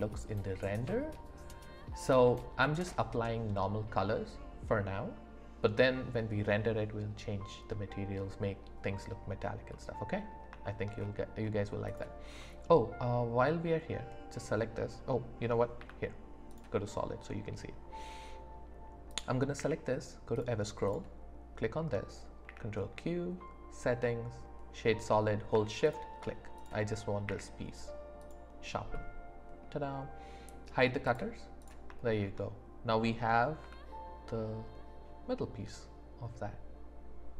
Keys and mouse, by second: 9.7 click, 9.7 middle click, 9.7 right click, 10.6 shift+middle drag, 12.4 middle click, 15.8 z, 19.1 click, 19.6 q, 20.9 click, 22.5 q, 26.6 click, 27.3 q, 28.9 middle click, 31.1 click, 31.6 click, 32.1 shift+drag, 32.3 shift+middle click, 33.6 s.